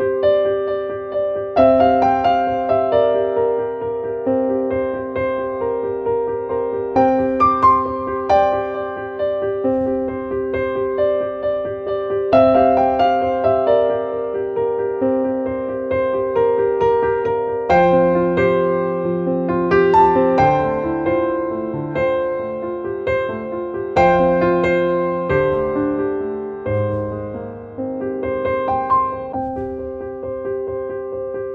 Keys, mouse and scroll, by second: 2.2 click, 3.9 click, 29.2-31.1 drag.